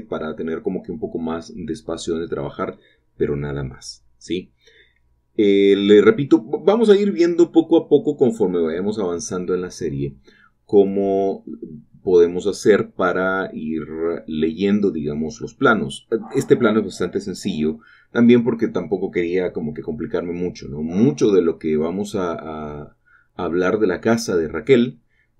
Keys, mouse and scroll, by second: 0.0-1.9 typing, 0.0-0.6 scroll up 1, 0.6 click, 0.9 shift+click, 2.9 shift+click, 4.1 typing, 5.5-6.3 scroll down 1, 6.9-7.5 scroll down 2, 7.5 shift+middle click, 9.6 click, 9.9 shift+click, 13.0 shift+click, 13.8 click, 13.8 typing, 16.1-16.8 typing, 17.8 shift+click, 18.2-18.9 typing, 19.8 shift+click, 20.2 click, 20.6 typing, 22.5 shift+click, 22.9 shift+click, 23.2 shift+middle click, 23.6 scroll down 1, 24.5 typing.